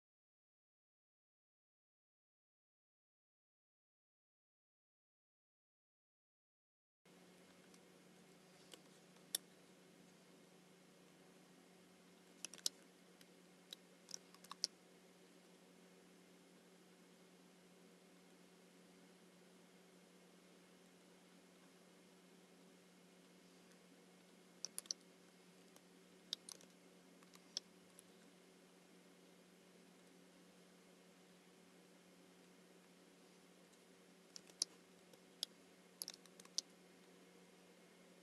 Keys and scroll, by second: 8.8 space, 12.6 super+c, 14.5 alt+super+b, 24.8 super+c, 27.3 alt+super+b, 36.4 alt+super+b.